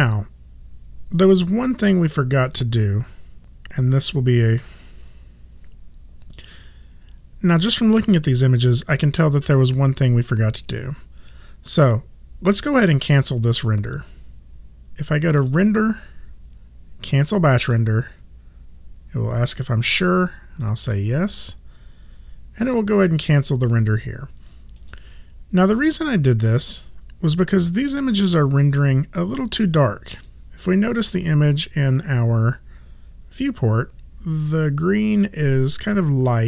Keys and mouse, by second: 15.4 click, 16.4 click, 18.9 click, 20.6 click, 24.8 click, 26.6 click, 29.1 click.